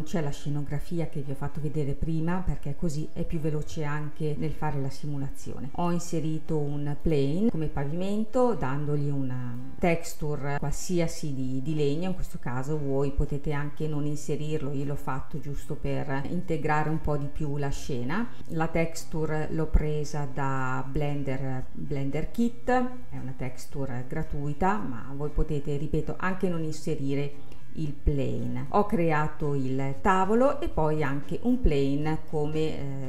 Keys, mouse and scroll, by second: 1.9-4.4 middle drag, 4.4-5.5 scroll up 2, 5.5-6.8 scroll up 1, 6.8 scroll down 1, 7.0 click, 7.5-9.2 middle drag, 9.7 click, 10.5-11.7 scroll up 1, 11.7-12.3 scroll up 1, 12.3-15.4 middle drag, 15.8-18.5 middle drag, 18.5-21.3 drag, 25.4-28.4 scroll up 1, 28.7-30.2 middle drag, 30.2-31.5 drag, 31.5-33.0 scroll up 3.